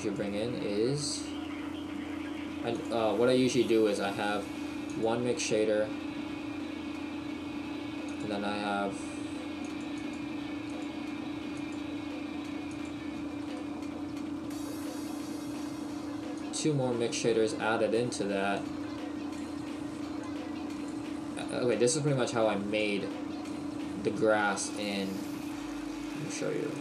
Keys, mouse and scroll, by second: 9.9 click, 13.4-13.9 scroll down 3, 13.9 shift+middle click, 14.4-15.2 scroll down 1, 15.2 shift+middle click, 17.5 click, 18.7 click, 20.4 click.